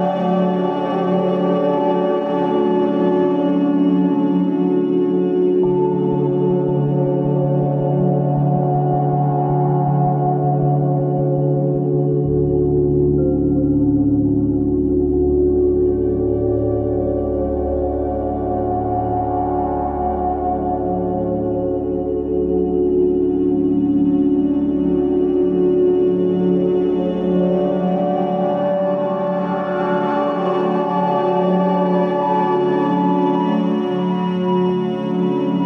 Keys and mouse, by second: 0.7 shift+z, 2.3 shift+z, 3.9 g, 13.2 shift+click, 15.3 shift+click, 16.6 shift+d, 20.4-21.8 middle drag, 22.1 Tab, 22.7-23.1 middle drag, 23.2 Tab, 23.5 click, 24.1-29.1 middle drag.